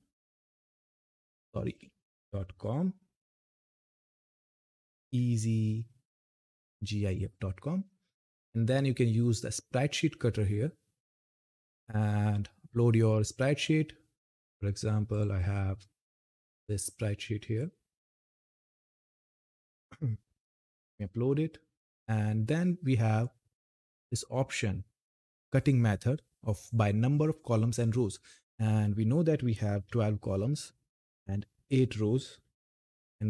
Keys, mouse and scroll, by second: 0.5 Return, 2.4 click, 4.6-5.0 typing, 6.8 click, 11.9-12.3 scroll down 1, 12.8 click, 17.9-18.9 scroll down 1, 18.9 click, 20.5 scroll down 1, 23.0 click, 28.6 click, 30.9 click.